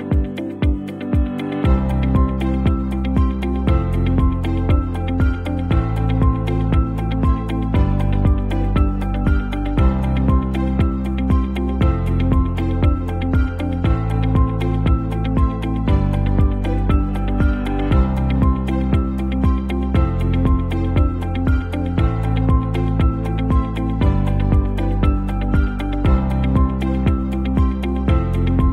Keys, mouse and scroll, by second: 5.6 alt+scroll up 1, 5.9 alt+scroll down 1, 6.3 alt+scroll up 1, 9.6 ctrl+n, 11.6 click, 12.4 alt+scroll up 1, 12.8-13.2 alt+scroll down 1, 16.6 right click, 17.4 click, 18.1 right click, 18.6-21.9 drag, 24.5-27.1 drag.